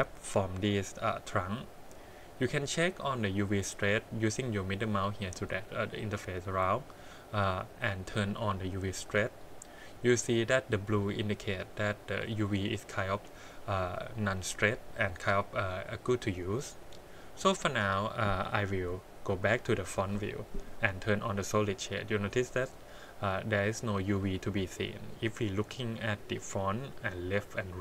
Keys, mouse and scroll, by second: 1.6-2.3 middle drag, 3.7-4.4 middle drag, 6.0 middle click, 7.1 click, 17.3 click, 19.3 KP_1, 19.9 shift+z, 22.0 middle click, 24.2 middle click.